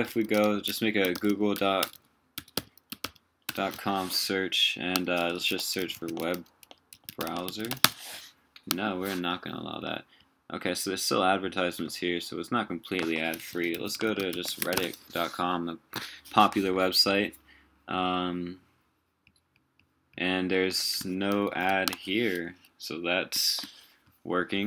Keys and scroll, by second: 13.5 super+t, 21.4 shift+super+4.